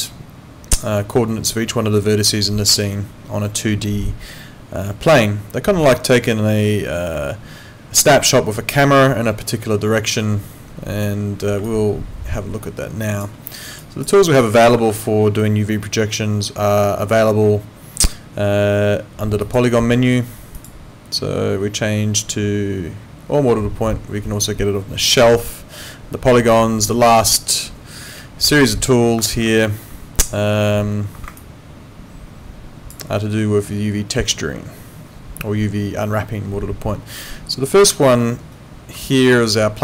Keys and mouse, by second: 13.8 alt+click, 14.8 ctrl+4.